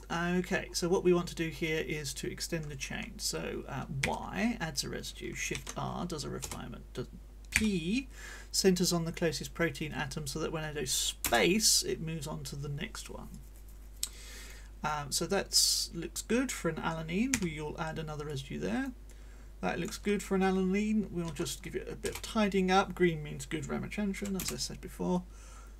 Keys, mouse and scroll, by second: 0.0-1.0 scroll up 2, 1.2-2.6 drag, 4.0 y, 5.5 shift+r, 6.4 Return, 7.5 p, 11.2 space, 13.3-14.6 drag, 14.8-16.7 drag, 17.3 y, 18.3-20.0 drag, 21.2 shift+r, 22.0 Return, 24.4 space, 25.1-25.6 scroll up 2, 25.6-25.7 drag.